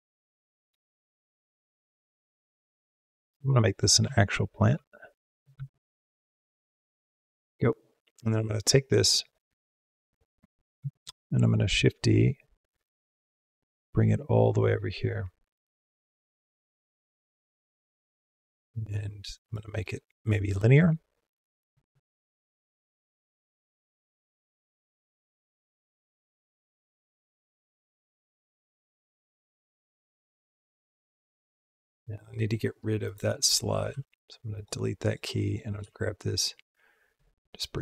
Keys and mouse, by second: 0.5 Left, 1.0 Right, 1.3 Right, 1.8 Right, 2.2 Left, 2.4 Left, 3.2-3.6 middle drag, 3.9 r, 4.7 g, 7.3 r, 9.0 click, 10.7 shift+d, 15.1-18.4 drag, 18.9-19.4 drag, 19.5-21.8 drag, 22.5-32.3 drag, 32.8 click, 33.4 click, 33.7 x, 34.8 click, 35.3 click, 35.6 g, 37.6-37.8 drag.